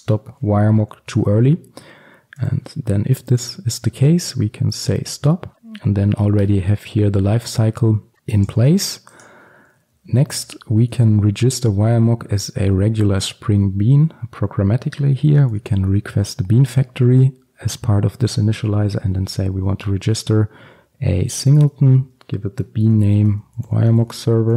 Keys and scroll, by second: 3.4 Return, 5.9 ctrl+alt+super+l, 8.1 ctrl+x, 11.9 Return, 13.0 Return, 16.7 Return, 21.6 Return, 23.3 Return.